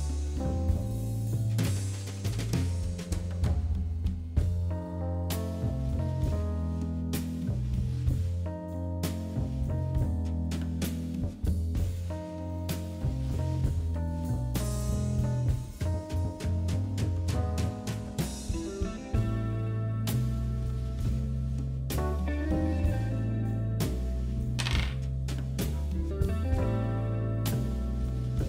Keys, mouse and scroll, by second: 4.2 click, 6.9 click, 7.7 click.